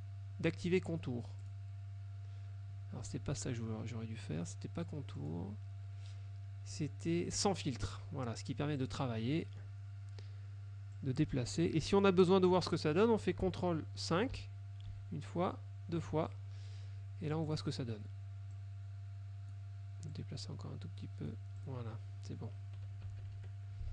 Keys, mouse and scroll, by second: 1.5 click, 3.4 ctrl+z, 5.3 click, 8.9 click, 9.5 middle click, 11.1-12.3 drag, 14.5 ctrl+KP_5, 17.6 click, 18.7 click, 20.2-21.6 drag, 21.7 click, 23.1 KP_Subtract.